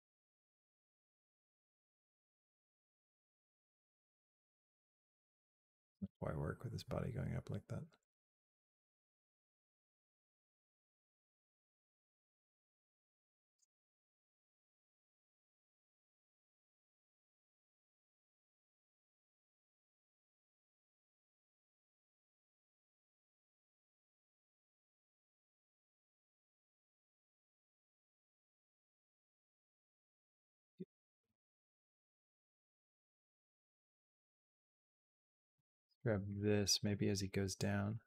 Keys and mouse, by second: 0.9-13.4 drag, 13.8 click, 15.2 g, 16.9-21.9 drag, 26.6 a, 26.9 b, 27.7 g, 30.5 click, 31.4 space, 32.5 space, 33.2-35.5 drag, 37.4 click.